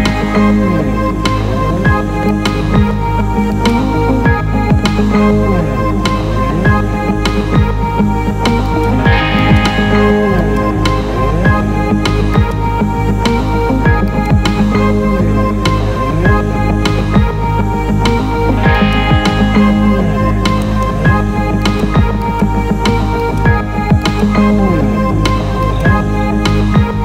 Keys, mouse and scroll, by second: 2.2 z, 2.3 click, 3.5 click, 5.3 z, 8.7 click, 9.4 alt+middle click, 10.6 ctrl+alt+middle click, 12.3 click, 12.8 z, 14.0 alt+middle click, 15.9 ctrl+b, 18.8 click, 19.9 Tab, 20.6-21.8 right drag, 22.2-22.8 alt+middle drag, 23.3-24.6 middle drag, 25.6 click, 26.4 s.